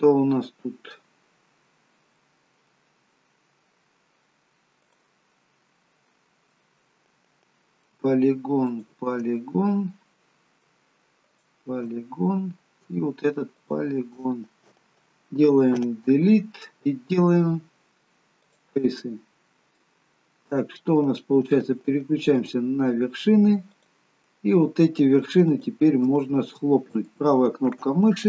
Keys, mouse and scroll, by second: 1.8-2.4 scroll up 2, 2.4 middle click, 2.9-4.6 scroll down 1, 4.9 click, 8.7 shift+click, 9.4 middle click, 11.3 shift+click, 12.1 middle click, 13.6 shift+click, 15.7 Delete, 19.3 Delete, 19.5 scroll up 2, 19.8 middle click, 22.4 click, 23.8 click, 25.5 shift+click, 26.2 shift+click, 27.1 right click.